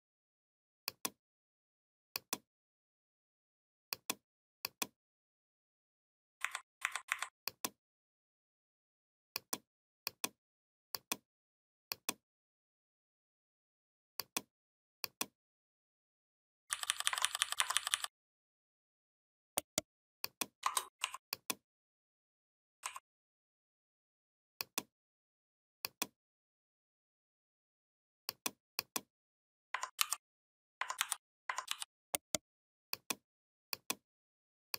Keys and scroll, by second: 6.2 Delete, 16.5 [, 17.0 ctrl+[, 17.6 ctrl+[, 29.8 ctrl+g, 30.8 ctrl+c, 31.5 ctrl+f.